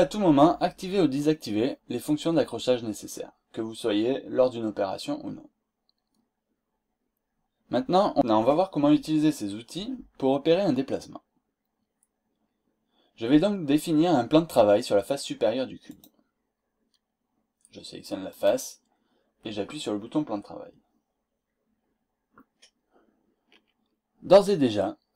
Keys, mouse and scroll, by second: 14.3-15.1 scroll up 2, 15.9 click, 18.3 click.